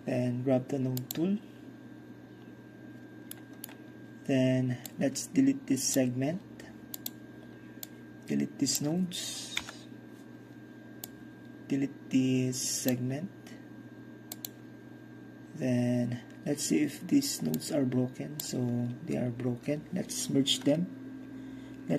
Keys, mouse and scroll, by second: 1.1 click, 2.3-4.9 scroll up 1, 3.4-4.9 middle drag, 4.9-9.8 drag, 9.7 Delete, 11.1-13.0 drag, 13.0 middle drag, 13.3-15.7 drag, 17.6-20.7 drag.